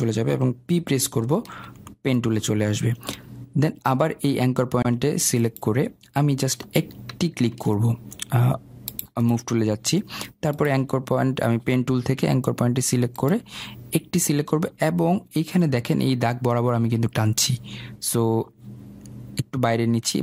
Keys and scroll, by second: 7.8 ctrl+z.